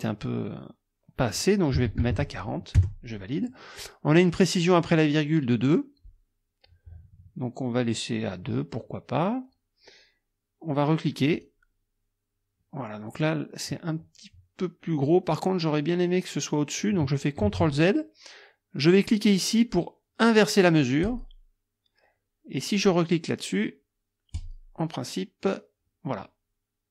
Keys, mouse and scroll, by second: 1.8 KP_4, 2.0 KP_0, 2.8 KP_Enter, 11.4 click, 17.4 ctrl+z, 21.0 click, 24.4 click.